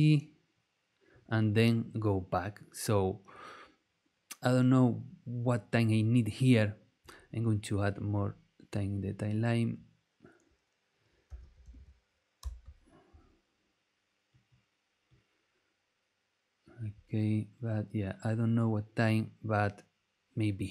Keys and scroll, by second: 11.0-12.1 typing, 12.4 Return.